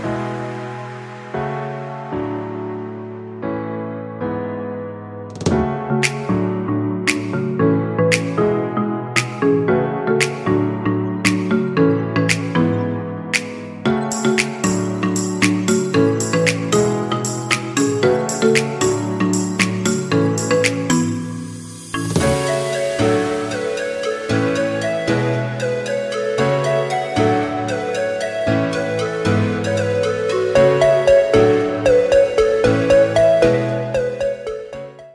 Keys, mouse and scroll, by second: 0.5-1.5 drag, 1.5-3.0 scroll down 5, 3.0-3.6 scroll up 5, 3.6 shift+middle click, 4.4 Tab, 5.8-7.9 scroll down 3, 7.9 click, 11.7 scroll down 5, 12.7-14.5 drag, 14.5-15.4 scroll down 7, 15.4-16.7 scroll down 1, 16.7 Tab, 17.5 click, 18.7 scroll down 4, 21.8-23.7 shift+middle drag, 27.8 drag.